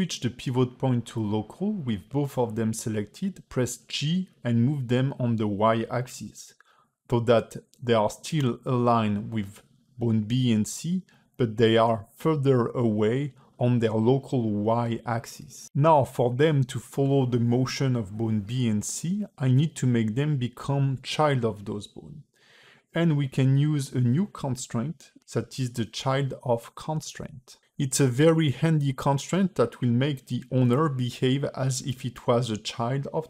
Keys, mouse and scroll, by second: 1.2 middle click, 2.6 g, 5.4 middle click, 6.7 middle click, 10.0 click, 18.3 click, 19.2 click.